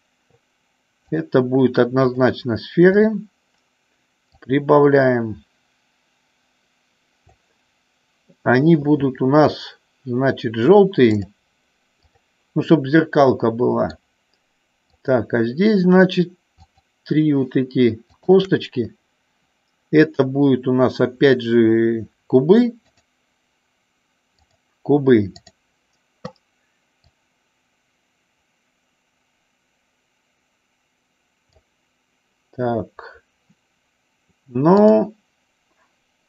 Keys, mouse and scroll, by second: 1.4 click, 4.2-7.4 drag, 11.2 click, 12.1 click, 13.3 middle click, 14.8-16.1 drag, 16.6 shift+click, 22.8-24.8 drag, 27.1-31.7 drag, 35.0 click.